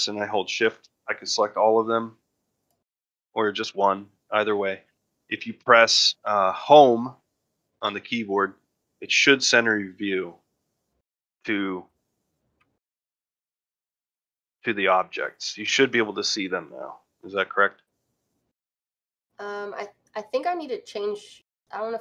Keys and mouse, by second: 0.3 shift+click, 7.4 Home, 12.4-13.2 middle drag, 13.4-13.7 middle drag, 13.8-14.4 middle drag, 14.6 middle drag, 15.5-16.0 middle drag, 18.3 ctrl+middle drag, 18.5 shift+middle click, 18.8 ctrl+middle drag, 19.2 shift+middle click.